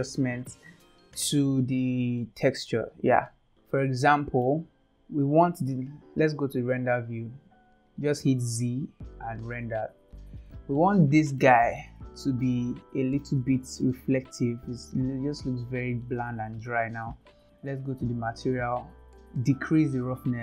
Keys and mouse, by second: 2.2 middle click, 3.3-4.4 middle drag, 8.3 z, 10.5 middle click, 11.5 shift+middle click, 12.5-13.2 middle drag, 13.8-16.0 middle drag, 16.7 click.